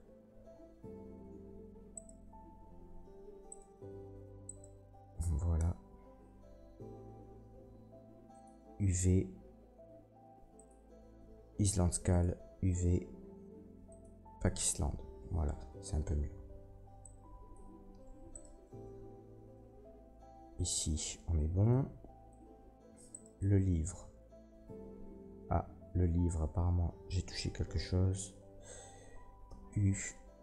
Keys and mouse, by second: 1.4 l, 1.9 click, 1.9 middle click, 1.9 right click, 3.1 Tab, 3.4 click, 3.4 middle click, 3.4 right click, 4.4 shift+click, 4.4 shift+middle click, 4.4 shift+right click, 5.6 Tab, 6.1 a, 17.1 click, 17.3-18.3 drag, 18.0 Tab, 18.3 middle click, 18.4-30.4 drag, 18.6 Tab, 19.1 a, 22.6 Tab, 23.1 middle click, 23.1 right click, 23.4 Tab, 23.7 a, 26.3 a, 29.4 a, 29.4 u.